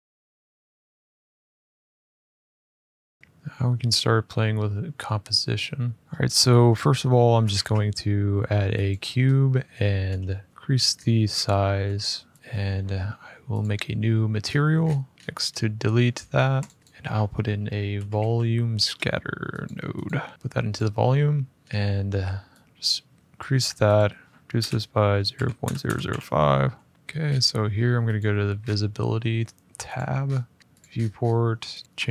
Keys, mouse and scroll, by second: 3.2 click, 3.2 r, 6.0 scroll, 6.5 scroll down 4, 6.9-7.3 scroll, 7.3 a, 8.6 click, 9.0-9.5 scroll, 9.5-9.8 scroll, 9.8 s, 10.5-11.2 scroll, 11.5 scroll, 11.6 s, 11.8 middle click, 12.0-12.4 scroll, 13.3 click, 14.0-15.1 scroll, 15.2-16.3 scroll, 16.4 click, 16.6 a, 16.8 click, 17.7-18.5 typing, 19.4 click, 19.8 click, 20.5 click, 21.5-22.1 scroll, 23.1 click, 23.7 click, 24.3-26.7 typing, 26.9-27.8 scroll, 27.9 click, 28.3-29.7 scroll, 29.7 click, 30.0 scroll, 30.0-31.5 scroll down 11, 30.6 click, 31.5 scroll down 3, 31.5 click, 31.8 click, 32.0 middle click, 32.0 middle click.